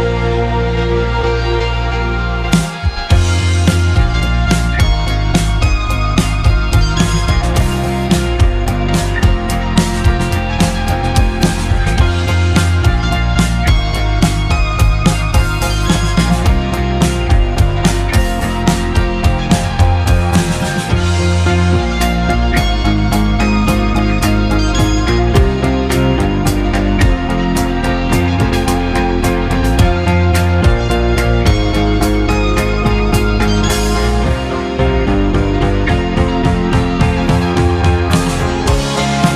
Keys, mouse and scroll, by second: 5.5-7.3 middle drag, 7.3 e, 10.1-11.5 middle drag, 11.5 ctrl+r, 13.8 ctrl+b, 16.9-17.9 middle drag, 17.9-18.9 scroll up 4, 19.2 3, 19.6 click, 20.9 shift+click, 21.3-22.8 middle drag, 22.8 shift+click, 23.8 shift+click, 24.4 click, 25.4 shift+click, 26.0 middle click, 28.0-28.7 scroll up 1, 28.7 e, 33.4 e, 35.2 s.